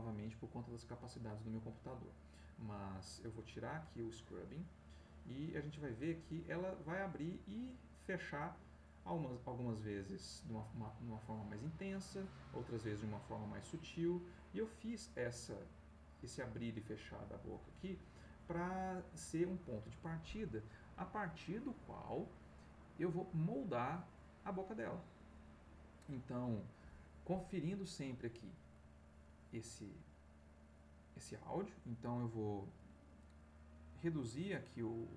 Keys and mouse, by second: 3.4 click, 4.3 click, 5.5-26.8 drag, 28.1 click.